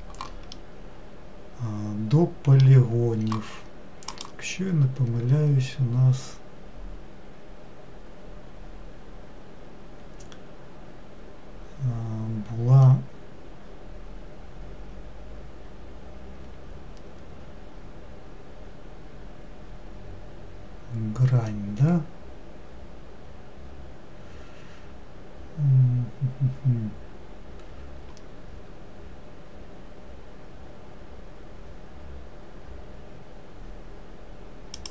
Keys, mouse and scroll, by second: 0.8-3.9 middle drag, 4.4-7.6 drag.